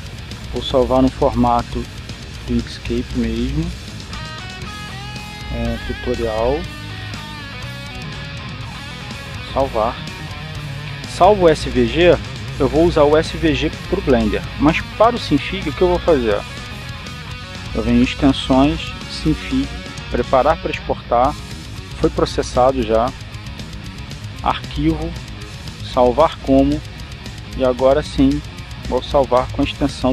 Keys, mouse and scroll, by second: 0.3 click, 2.2 click, 3.5 click, 4.2 click, 5.0 click, 7.4-9.1 typing, 10.4 click, 19.1 click, 21.5 click, 25.4 click, 27.2 click, 28.4 click.